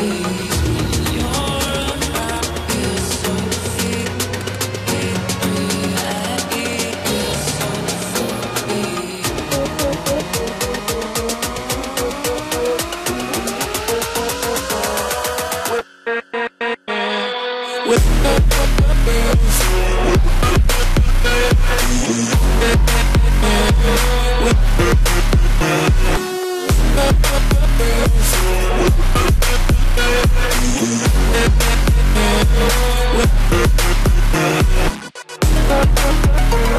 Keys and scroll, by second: 2.7 ctrl+z, 3.2 ctrl+z, 10.8 ctrl+-, 33.3 ctrl+j, 34.1 ctrl+j.